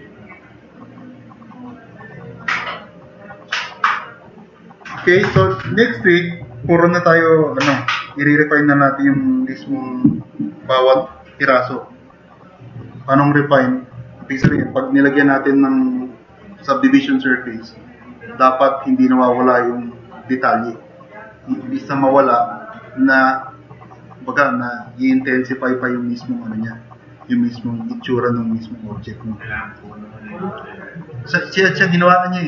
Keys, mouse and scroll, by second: 1.9-2.7 drag, 2.9 click, 4.5 click, 5.3 click, 10.6 click, 29.8 click.